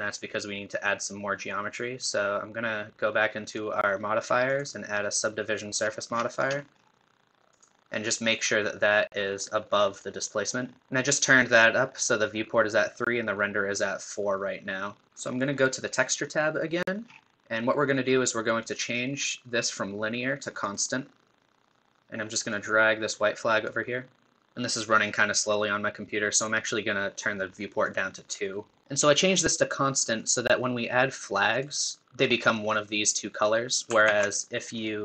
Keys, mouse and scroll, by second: 1.6-3.5 scroll down 1, 3.5-4.5 drag, 9.9-12.7 drag, 15.1-16.3 middle drag, 15.1-16.3 scroll down 2, 16.3 click, 17.1-18.1 scroll down 2, 18.1-19.6 scroll down 1, 19.6-24.3 drag, 25.5-32.3 drag, 34.1 ctrl+z, 34.8-35.0 drag.